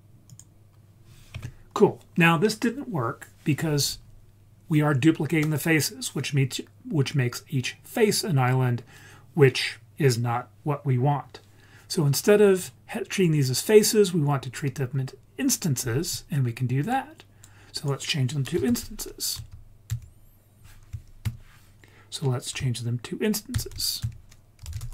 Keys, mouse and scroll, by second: 0.3 click, 1.8-3.3 scroll up 3, 12.2-14.7 scroll up 3, 14.7-16.6 scroll up 3, 16.8-17.4 drag, 17.7 click, 18.7 shift+a, 23.5 shift+a.